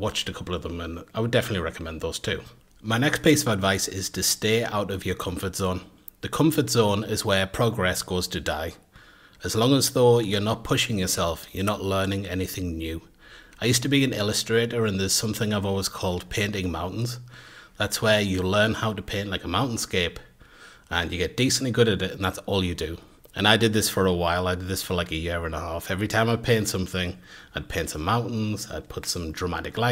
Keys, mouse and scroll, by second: 0.6 shift+middle click.